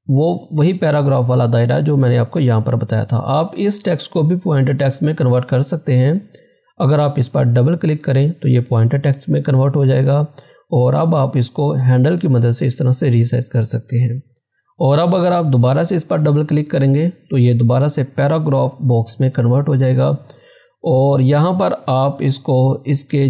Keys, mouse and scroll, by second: 7.7 click, 11.9-14.2 drag, 14.2 ctrl+z, 15.3 ctrl+z, 16.6 click, 19.4 click, 19.5 scroll down 1.